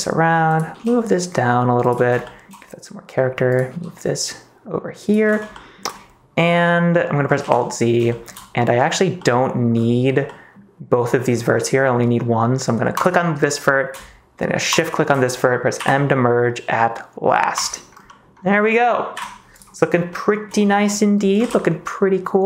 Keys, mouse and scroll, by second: 0.7 g, 1.8 click, 2.2 shift+middle click, 3.4 click, 3.6 g, 4.9 click, 5.5 shift+middle click, 7.4 alt+z, 8.0 shift+middle click, 9.1 middle click, 10.3 middle click, 14.6 shift+click, 15.7 m, 18.0 middle click, 19.1 KP_1, 19.5 click, 20.1 shift+middle click, 21.4 ctrl+s, 21.6 middle click.